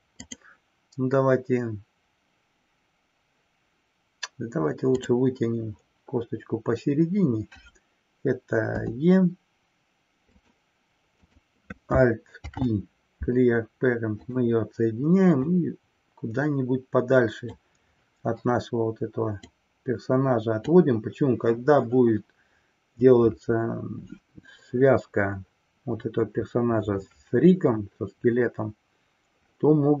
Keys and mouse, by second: 0.3-0.6 drag, 10.5 click, 11.1 click, 12.5 alt+p, 15.5-17.6 drag, 19.5-20.9 drag.